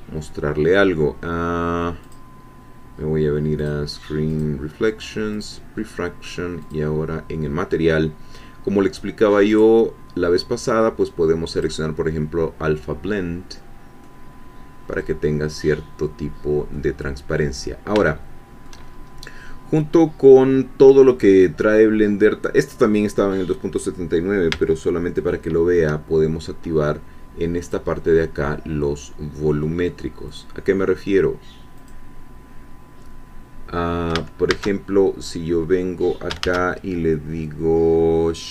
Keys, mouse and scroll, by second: 2.0 click, 3.6 click, 4.3 click, 5.3 click, 6.6 click, 7.6 middle click, 7.6-8.7 scroll down 2, 7.9 middle click, 9.5 click, 11.5 click, 14.0-15.4 middle drag, 15.5-15.9 scroll up 1, 16.0 middle click, 17.0 scroll down 1, 17.3 middle click, 18.1 shift+middle click, 18.9 shift+scroll up 2, 27.6 click, 30.3 click, 31.7 click, 34.5 shift+a, 36.4 shift+a.